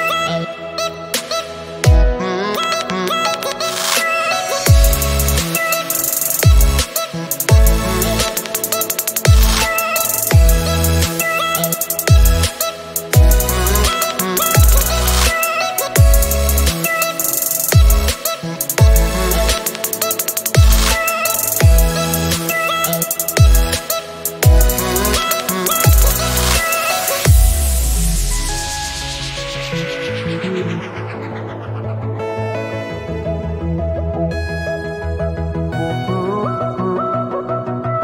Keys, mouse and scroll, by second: 1.1 click, 1.9 scroll up 3, 3.4-3.8 scroll up 1, 3.8-6.9 drag, 7.7 click, 8.7 click, 10.5 click, 12.9-16.1 drag, 18.8-20.4 drag, 20.7 click, 21.6-22.3 scroll up 5, 22.3-23.8 scroll down 4, 23.8 click, 24.3-26.3 scroll down 4, 26.3 click, 27.7 g, 30.2 shift+a, 33.8-35.4 scroll up 2, 35.5-38.0 drag.